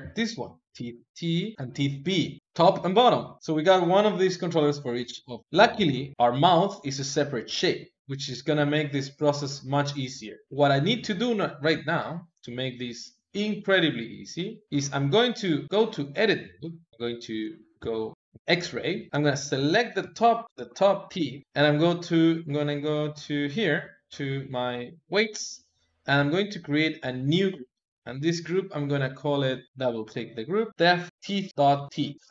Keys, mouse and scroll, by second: 1.4 click, 1.5 shift+middle click, 3.4 KP_1, 5.4 click, 5.6 ctrl+Tab, 6.1-7.6 middle drag, 7.6 KP_3, 8.4 g, 15.6 Tab, 16.9 alt+x, 17.4 alt+z, 18.1 shift+middle click, 19.1-21.1 typing, 21.4 click, 22.7 click, 24.9 click, 26.5-28.3 drag, 28.5-29.6 drag, 29.8 click, 29.9-31.1 drag, 31.1 BackSpace, 31.1 e, 31.5 BackSpace.